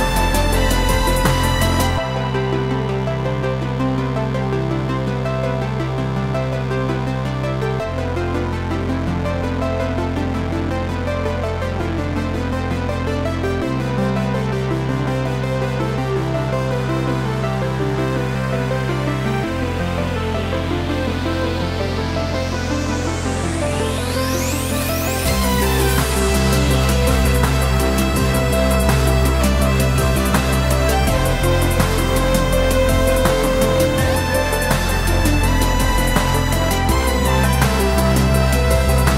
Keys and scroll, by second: 0.8 Left, 9.4 ctrl+c, 10.4 ctrl+v, 11.7 Right, 16.8 Up, 19.3 Right, 20.2 Up, 21.5 Left, 33.7 ., 34.8 4.